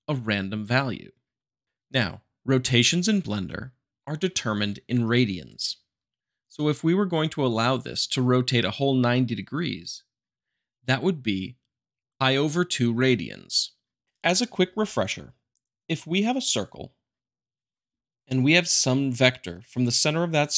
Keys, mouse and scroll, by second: 17.4 click.